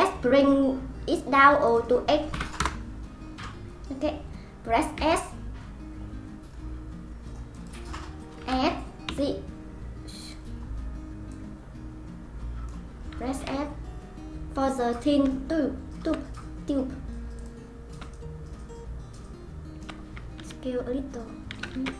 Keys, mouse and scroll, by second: 5.0 s, 8.4 s, 11.3-13.4 drag, 13.4 s, 15.3-16.3 shift+middle drag, 16.3-17.3 scroll down 3, 17.3 click, 18.1-20.4 shift+middle drag, 20.4 s.